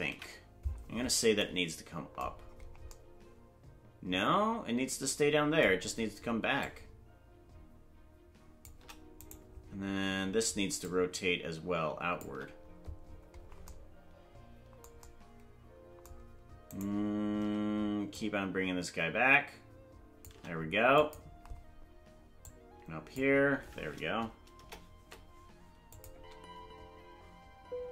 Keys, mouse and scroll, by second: 0.1 KP_Decimal, 2.3-2.9 scroll down 6, 6.6-8.7 shift+drag, 9.3 right click, 10.8-12.2 shift+drag, 13.0-13.7 scroll down 8, 16.8 right click, 18.1-20.3 shift+drag, 21.0 click, 22.4 click, 24.5 KP_0, 25.9 click, 26.1 space.